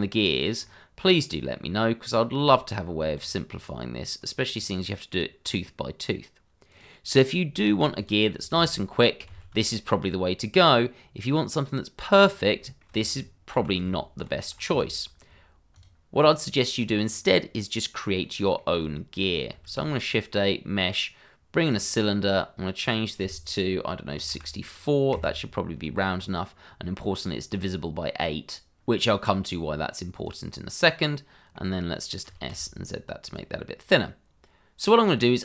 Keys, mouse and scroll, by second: 1.6 scroll up 1, 3.1 Tab, 4.0 click, 4.8 scroll down 1, 6.7 click, 7.5 scroll up 1, 7.9 click, 8.5 shift+z, 9.5 scroll down 1, 12.1 click, 12.6 middle click, 12.8 shift+middle click, 13.8 y, 14.7 x, 15.7 click, 16.3 double click, 16.4 scroll down 1, 17.2 scroll up 1, 17.7 middle click, 19.0 shift+middle click, 19.6 shift+a, 21.7 click, 24.3 KP_6, 25.1 KP_Enter, 30.1 click, 31.0 middle click, 32.2 s, 32.5 z, 33.2 click, 33.6 middle click.